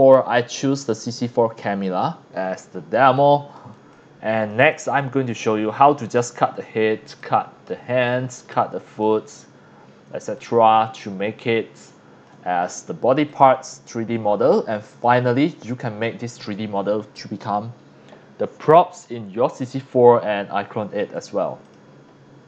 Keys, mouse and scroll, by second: 0.8 click, 1.9 scroll down 1, 2.1-2.9 scroll up 4, 3.1 x, 3.2-3.5 drag, 3.8 x, 3.9-4.5 drag, 4.6 c, 4.8-5.2 drag, 5.5 scroll down 1, 6.8 scroll down 1, 7.1-9.0 typing, 7.2-7.7 drag, 8.0 drag, 8.5-9.0 drag, 9.9 scroll down 1, 10.2 x, 10.3-10.7 drag, 11.0-12.3 drag, 13.3 click, 14.9 click, 21.6 click.